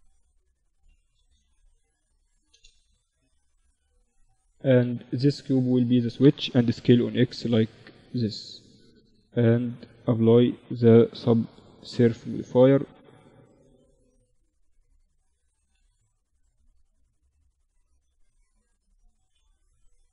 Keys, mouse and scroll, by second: 0.0 s, 1.3 s, 3.1 s, 4.9-6.8 drag, 5.8 s, 8.5-10.4 drag, 9.5 ctrl+2, 11.7 Tab, 12.5 ctrl+r, 14.9 ctrl+r, 16.6 ctrl+r, 18.5 z, 18.8-20.0 middle drag.